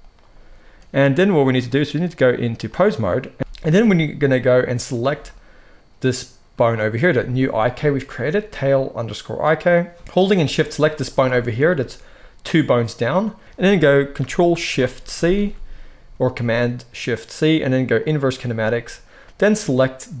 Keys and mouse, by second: 3.3 alt+a, 3.3-10.9 middle drag, 7.0 g, 10.9 shift+click, 11.2-20.2 middle drag, 13.4 ctrl+p, 15.0 ctrl+shift+c.